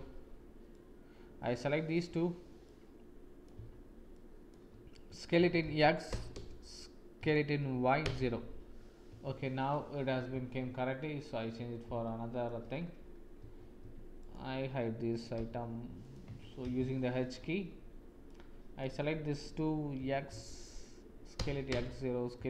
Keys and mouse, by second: 0.7-1.9 drag, 2.7 click, 4.1 shift+click, 5.3 s, 7.1 s, 9.2 Tab, 9.5 click, 10.3 ctrl+s, 11.2 click, 11.5 middle click, 12.0 shift+click, 12.0 shift+middle click, 12.2 shift+click, 13.4 Tab, 13.9 Tab, 14.2-15.3 drag, 15.3 h, 16.0 click, 16.2 Tab, 17.0 shift+click, 18.2 click, 19.9 s, 22.3 s.